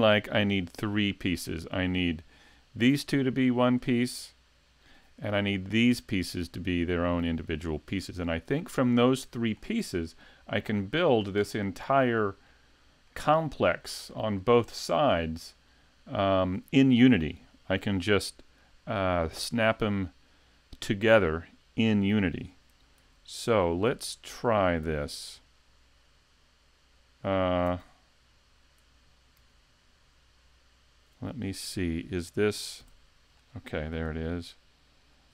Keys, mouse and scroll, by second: 1.2 shift+click, 2.6 right click, 3.6 shift+right click, 10.7-11.8 scroll down 12, 11.8 middle click, 13.1 middle click, 14.1 middle click, 15.5 middle click, 21.8-22.2 scroll up 2, 22.2-22.8 scroll down 1, 22.8 scroll down 1, 23.0 super+z, 23.5 super+z, 23.9 super+z, 24.3 super+z, 24.9 super+z, 27.7 z, 29.4 z, 32.9 g, 33.5 right click, 35.0 shift+click.